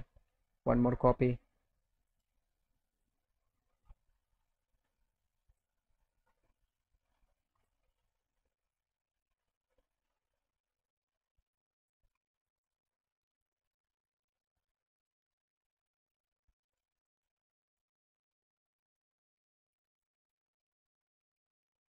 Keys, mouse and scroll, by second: 2.0 shift+click, 2.9 click, 4.7 click, 6.3-7.7 drag, 8.7-11.9 drag, 12.2 alt+click, 13.5-14.9 drag, 15.2 alt+click, 16.2 shift+click, 17.1 shift+click, 17.6 shift+click, 18.0 shift+click, 18.2 shift+click, 19.3 alt+click, 19.9 click, 20.3 alt+click, 21.0 alt+click.